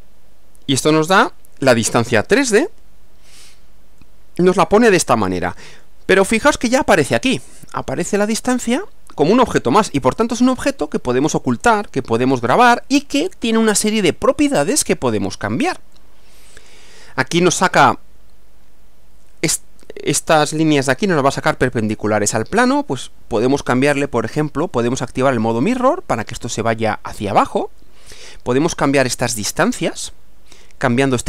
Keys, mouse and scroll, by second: 1.1 click, 4.0-6.0 middle drag, 7.4 click, 10.0 space, 16.0-17.1 middle drag, 24.9 click, 25.6 click, 26.5 click, 27.8-28.7 middle drag.